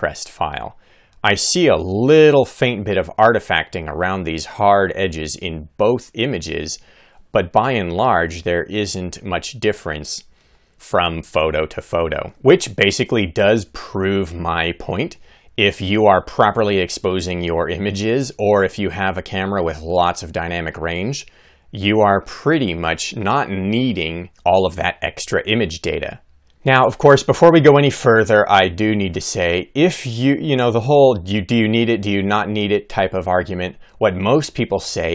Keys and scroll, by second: 8.2 Right, 9.4 Left, 10.5 Right.